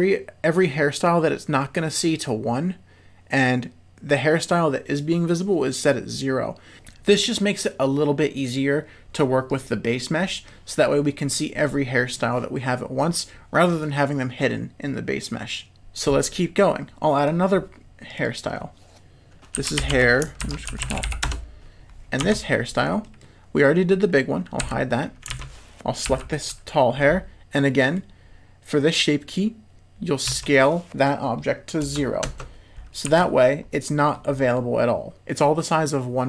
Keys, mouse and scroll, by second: 9.5 click, 10.4-10.8 middle drag, 11.6 middle click, 18.1 click, 18.3-21.8 drag, 21.0 l, 22.2 Tab, 23.0 middle click, 24.6 h, 25.4 alt+a, 26.0 l, 26.9 middle click, 30.3 s, 33.0 z, 33.8 middle click, 34.5 middle click, 35.2 z.